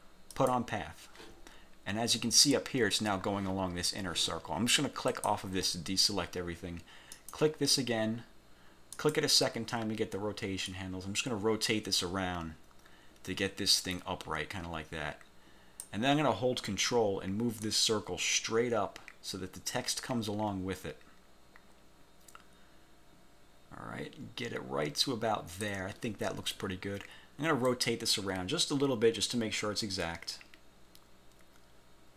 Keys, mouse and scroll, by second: 0.4 click, 5.3 click, 7.3 click, 9.1 click, 10.8-16.1 drag, 17.7-25.9 ctrl+drag, 26.2 ctrl+scroll up 3, 27.8 click.